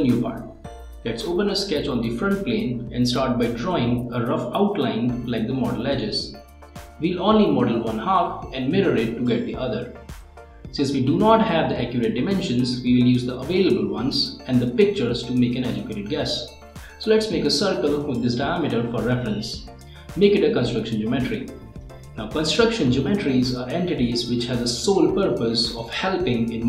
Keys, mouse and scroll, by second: 17.4 right click, 18.8 click, 19.8-21.1 right drag, 21.5 click, 22.1 click, 23.3 m, 25.3 right click.